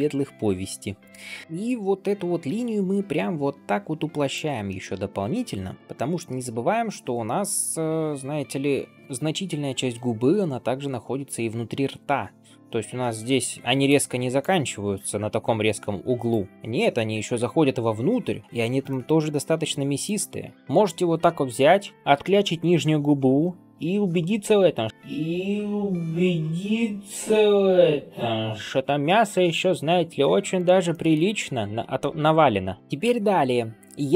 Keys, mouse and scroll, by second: 2.0 s, 4.5 shift+middle click, 5.3 middle click, 5.8 g, 13.8 click, 14.3-16.2 d, 16.2 right click, 16.5 d, 16.6 d, 18.8-19.9 middle drag, 20.2-20.5 scroll down 1, 20.5 g, 30.4 click, 30.8 middle drag, 31.2 scroll up 2, 31.5-32.0 middle drag, 32.2 scroll down 1, 32.5 shift+middle click, 32.8-33.4 scroll up 1, 33.4-33.9 scroll down 1, 34.0 scroll down 1.